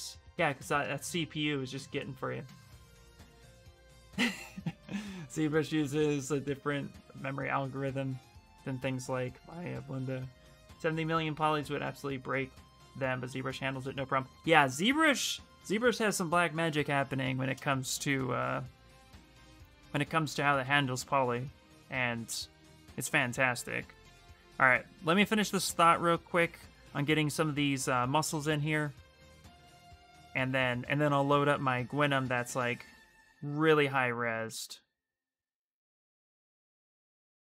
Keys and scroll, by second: 19.9-21.1 typing, 22.7 space.